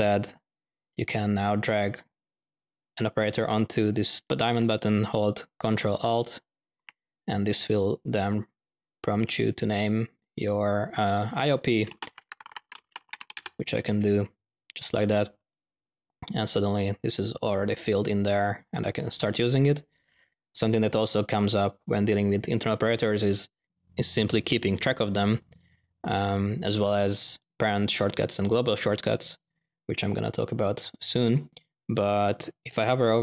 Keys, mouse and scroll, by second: 2.3-3.9 drag, 9.8-10.3 drag, 10.6-11.1 drag, 11.4-13.6 typing, 15.2-15.9 typing, 15.2 ctrl+drag, 17.2-17.8 drag, 30.5-31.3 drag.